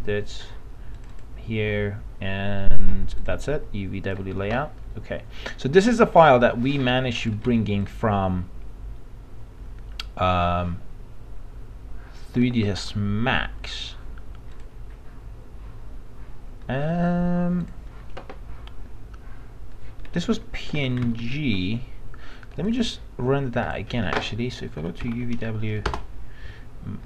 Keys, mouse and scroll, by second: 2.0-18.6 drag, 20.3 alt+Tab, 21.2 alt+Tab, 22.7 click, 24.9-25.9 typing.